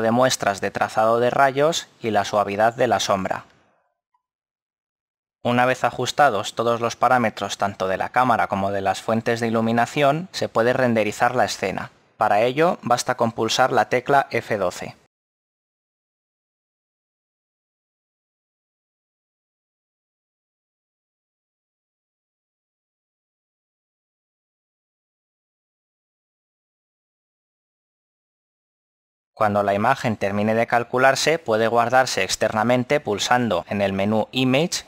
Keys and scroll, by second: 0.6 s, 7.7 KP_7, 10.7 5, 11.3 Return, 13.0 KP_0, 14.3 F12.